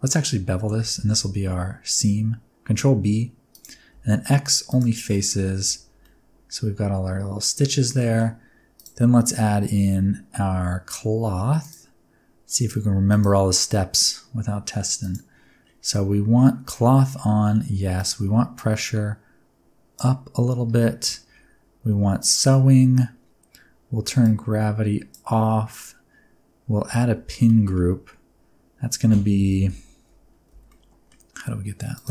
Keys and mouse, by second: 0.7 ctrl+b, 3.5 shift+click, 3.9 x, 5.6 Tab, 6.0-8.0 middle drag, 8.7-10.2 drag, 11.6 click, 13.1 click, 15.0 click, 18.0 click, 18.6-20.0 drag, 22.2 click, 24.2 click, 26.9 Tab, 27.4 middle click, 29.6 l, 30.5 alt+z, 30.7 middle click, 32.0 alt+click.